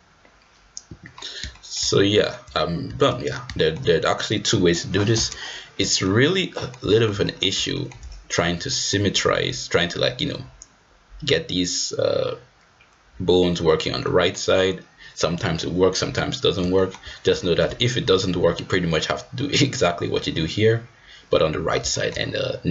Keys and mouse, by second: 0.3 g, 1.5 shift+middle drag, 2.1 shift+middle click, 3.5 shift+middle drag, 6.0 shift+middle drag, 6.5 middle click, 6.9 shift+middle drag, 7.7 shift+middle click, 8.6 middle drag, 14.0 middle drag, 16.7 shift+middle drag, 17.4 shift+middle click, 21.9 shift+middle click.